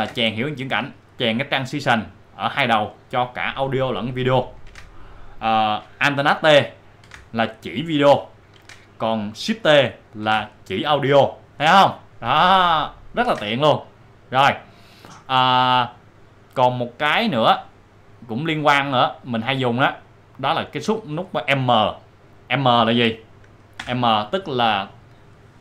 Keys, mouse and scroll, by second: 0.0 ctrl+t, 3.5 click, 4.6 click, 4.7 ctrl+z, 5.1 click, 6.4 click, 7.0 alt+t, 8.5 ctrl+alt+t, 8.6 ctrl+z, 9.6 ctrl+shift+z, 10.2 shift+t, 12.4 click, 18.8-23.5 drag, 23.8 m, 25.0-25.6 drag.